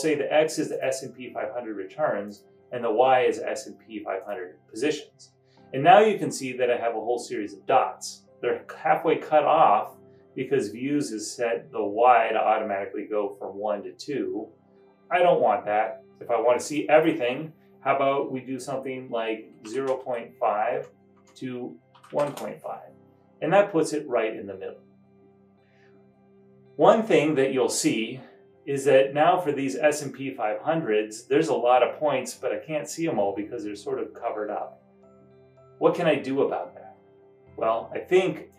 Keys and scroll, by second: 19.6-20.6 typing, 20.8 Tab, 21.2 Tab, 21.7-22.7 typing, 25.1-25.9 typing.